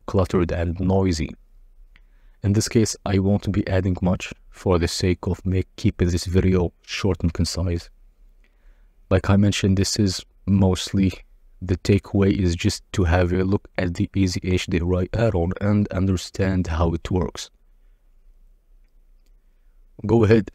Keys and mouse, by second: 1.6 click, 3.9 click, 3.9-5.8 typing, 5.5 shift+click, 10.1-14.3 shift+middle drag, 11.5 shift+d, 12.3 y, 15.2 r, 15.2 z, 15.8 r, 17.7 s, 18.0 g, 18.0 z, 18.3 shift+click, 19.1 z, 19.1 r, 20.4-20.5 middle drag.